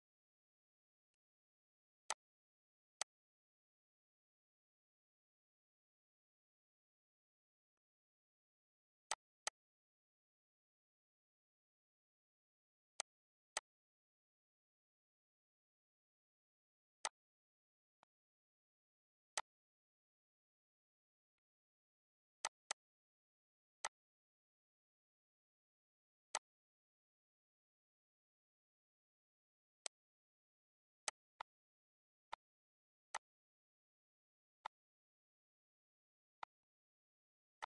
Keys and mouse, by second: 1.0 click, 2.0 click, 2.9 click, 7.6 click, 9.0 click, 12.8 click, 13.4 click, 17.2 click, 17.4 c, 17.8 click, 19.2 click, 21.2 click, 21.9 ctrl+c, 22.3 click, 23.7 click, 26.2 click, 29.7 click, 30.4 ctrl+c, 30.9 click, 32.1 click, 33.0 click, 34.5 click, 35.7 ctrl+c, 36.2 click.